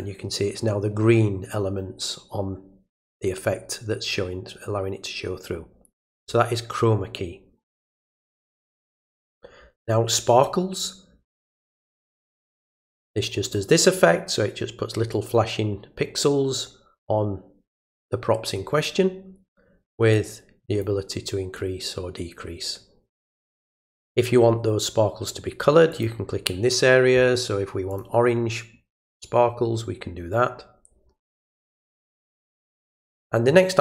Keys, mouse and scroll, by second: 8.1 click, 12.0-13.5 drag, 20.1-20.8 drag, 21.6-23.6 drag, 25.9 click, 27.9 click, 29.1 click, 32.8-33.2 drag.